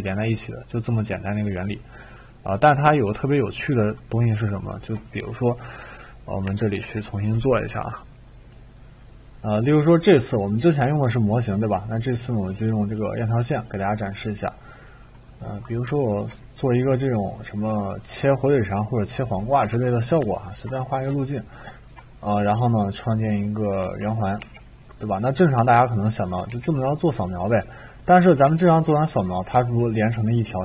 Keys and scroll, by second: 6.5 Delete, 6.8 Delete, 19.6 Escape, 24.4 t, 26.5 e.